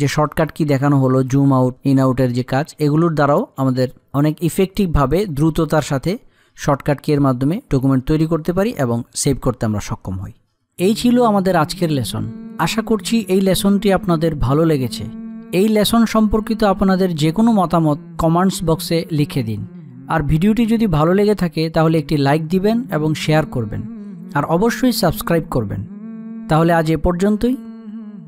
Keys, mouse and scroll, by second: 3.6 space, 3.8 click, 4.1 space.